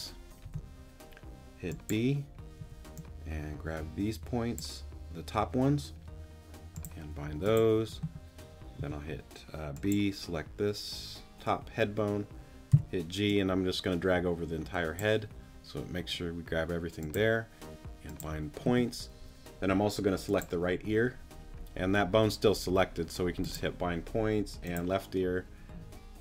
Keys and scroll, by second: 0.4 b, 2.6 g, 8.8 b, 12.7 g.